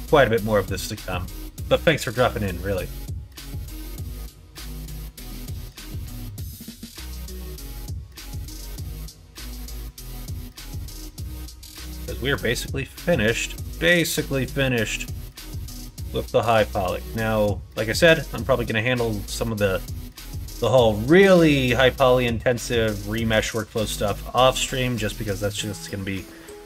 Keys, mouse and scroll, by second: 3.3 g, 8.6 middle click, 9.4 alt+z, 10.0 click, 10.9 click, 11.3 middle click, 12.0 middle click, 12.6-14.5 middle drag, 15.0 middle click, 15.7 click, 15.9 Tab, 16.5 click, 16.7 middle click, 17.6 middle click, 18.1 middle click, 19.1 middle click, 20.1 middle click, 21.2 middle click, 22.9 shift+middle click, 23.7 middle click, 24.2 shift+middle click, 24.8 middle click, 25.3 middle click.